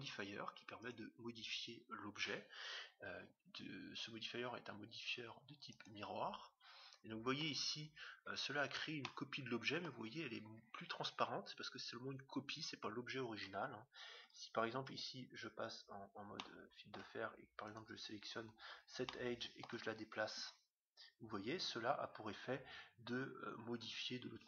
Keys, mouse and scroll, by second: 7.3-10.7 middle drag, 8.5-9.0 scroll down 1, 13.6 Tab, 14.2 Tab, 14.9 z, 15.8 middle click, 17.7 click, 17.7 middle click, 17.9-19.2 right drag, 19.0-20.6 middle drag, 20.4 g.